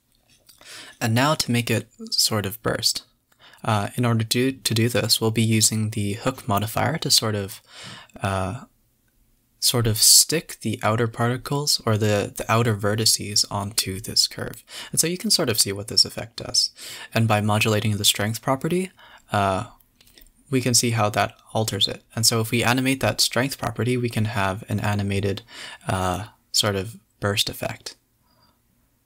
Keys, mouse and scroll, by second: 0.0-0.8 drag, 0.8 space, 0.9 scroll up 4, 1.3 scroll down 1, 2.9 space, 3.0 click, 3.2 g, 4.4 click, 4.6 space, 6.1-7.3 drag, 7.3 space, 7.8 click, 8.1 click, 8.7-10.8 drag, 11.2 click, 12.1 click, 13.6-17.5 drag, 20.1-23.3 drag, 27.2 click, 28.2-29.0 drag.